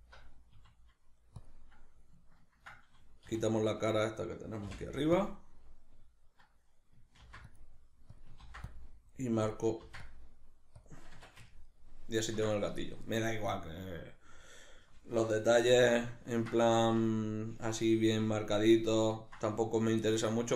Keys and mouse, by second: 0.0 alt+right click, 0.5 s, 1.5 click, 3.3 3, 3.5 right click, 3.9 right click, 4.7 x, 8.2 click, 8.4 ctrl+r, 9.5 click, 9.8 ctrl+r, 10.9 click, 11.1 Tab, 11.5-20.5 ctrl+middle drag, 15.6 alt+q, 16.8 alt+q.